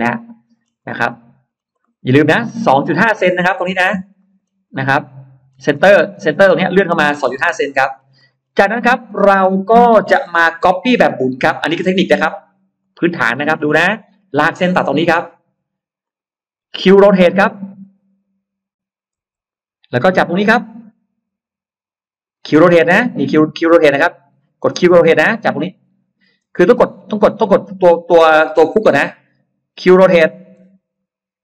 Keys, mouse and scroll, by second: 0.7 scroll up 1, 1.3-1.7 scroll down 1, 1.7 middle click, 2.1 scroll down 2, 2.3-2.7 scroll up 2, 3.7-4.5 scroll down 4, 4.1 middle click, 4.6 middle click, 5.3 scroll down 1, 5.7-6.5 scroll up 2, 5.8 middle click, 7.3 middle click, 7.5-8.4 scroll down 2, 8.0 middle click, 8.5 middle click, 8.9-9.3 scroll down 1, 10.8 click, 10.8 l, 12.7 click, 13.2 space, 13.5-13.8 scroll up 1, 13.7-14.9 middle drag, 15.0 scroll up 1, 15.9 click, 16.9 middle click, 16.9 scroll up 1, 19.4 q, 26.3 space, 26.7 click, 30.7 q.